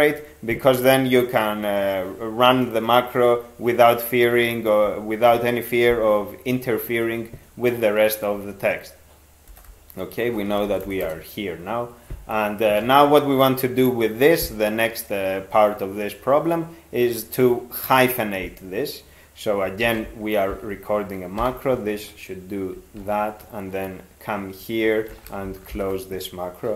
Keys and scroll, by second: 9.5-11.0 typing, 12.8 ctrl+a, 19.8 ctrl+x, 20.5 (, 21.4 -, 23.0 ctrl+f, 25.1 ctrl+x, 25.7 ).